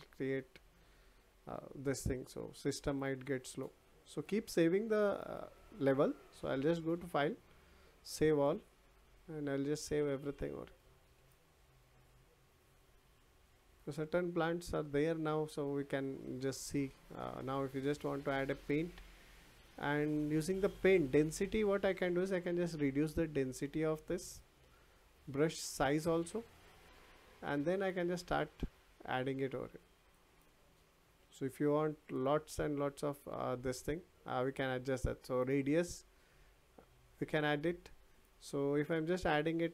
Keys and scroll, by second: 33.2 ctrl+z.